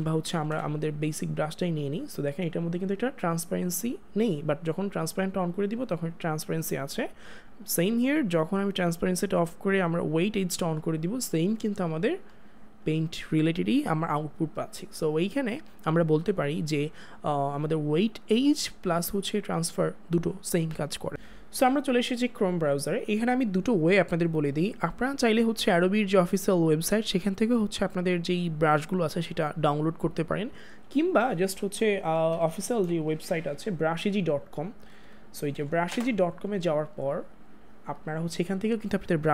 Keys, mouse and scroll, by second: 0.7 click, 4.7 click, 8.8 click, 9.9 click, 21.1 click, 32.3 b, 34.9 Down, 35.9 Return.